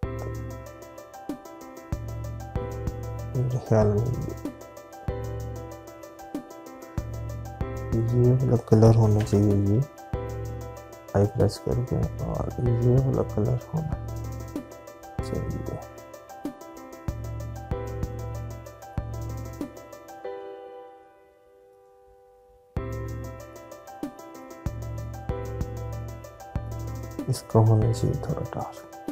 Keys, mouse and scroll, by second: 5.2 click, 8.7 click, 10.3 i, 10.6 click, 19.7 click.